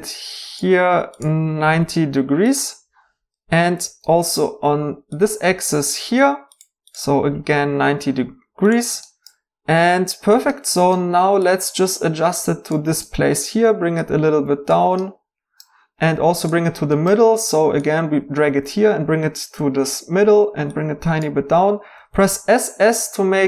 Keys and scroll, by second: 1.6 typing, 3.8 r, 7.7 typing, 10.2-11.0 typing, 21.9-22.2 typing.